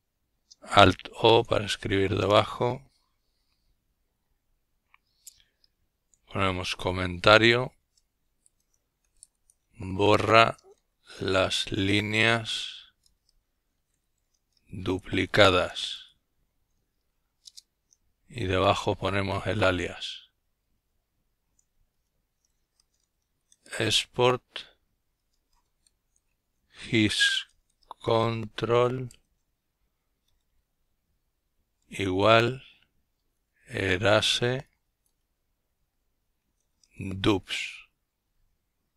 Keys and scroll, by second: 0.6 Return, 5.0 typing, 6.4-14.7 typing, 15.7 Return, 20.1-22.2 typing, 23.7-27.8 typing, 30.1 typing, 31.9-35.9 typing, 37.3 Return, 38.6 Return.